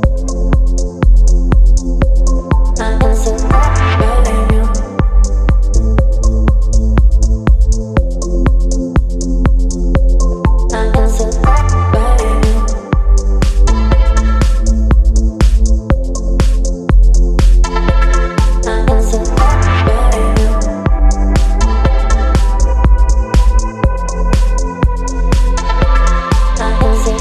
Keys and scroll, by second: 3.4 space, 12.6 ctrl+t, 17.6 Return.